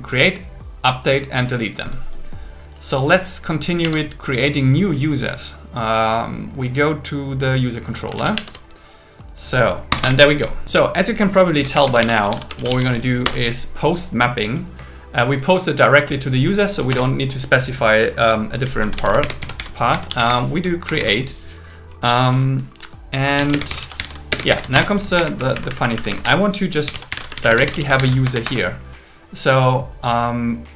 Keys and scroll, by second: 3.8 super+1, 8.2 super+1, 9.9 Return, 11.8 alt+l, 12.0 shift+p, 12.6 shift+m, 13.2 Return, 16.9 Return, 19.2 space, 20.6-21.5 typing, 23.1-24.7 typing, 24.7 Return, 25.2 Up, 25.4 Right, 26.3 Right, 27.2-28.1 typing, 28.2 Escape.